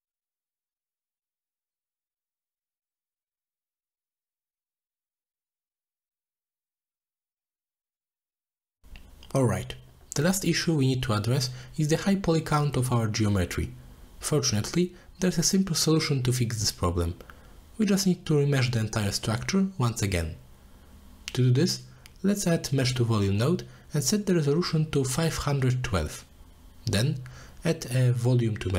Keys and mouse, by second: 1.3 click, 1.5 click, 1.8 click, 2.9 click, 3.5 click, 4.0-4.7 drag, 6.1 middle click, 6.3 middle click, 6.4 middle click, 6.7 middle click, 7.0 click, 8.1 middle drag, 8.5 middle click, 12.6 middle click, 13.4-15.9 drag, 16.0 click, 16.7 click, 20.3 z, 21.9 z, 22.5 middle click, 23.8 middle click, 24.0 middle click, 24.8 click, 25.1 click, 25.7 middle click, 26.1 shift+d, 27.2 middle click, 27.8-28.7 drag.